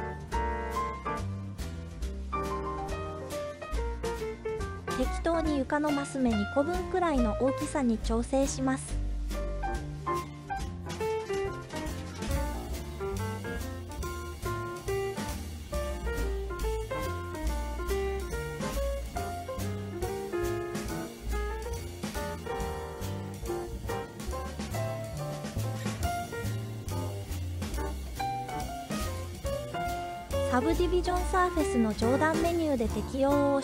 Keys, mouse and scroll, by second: 2.2 s, 3.5 drag, 4.1-4.4 scroll down 1, 4.7-5.3 scroll down 3, 5.3-6.3 scroll up 4, 6.3 scroll down 1, 7.1 scroll up 1, 7.7-8.6 scroll up 3, 9.3-9.7 scroll up 3, 10.5 s, 11.8 click, 12.2-12.8 middle drag, 13.3 s, 13.9-14.4 drag, 14.4-16.1 middle drag, 16.4-17.1 scroll down 1, 17.1-18.0 middle drag, 19.2 scroll up 2, 20.1 scroll up 1, 20.3-20.9 scroll down 1, 20.9 s, 22.6 click, 23.1 middle click, 23.6-24.0 scroll up 1, 24.2 scroll up 1, 24.3 middle click, 25.2-25.7 scroll down 1, 25.7 middle click, 27.2-27.8 shift+middle drag, 28.1 middle click, 29.4 click, 29.9 click, 31.9-33.6 drag.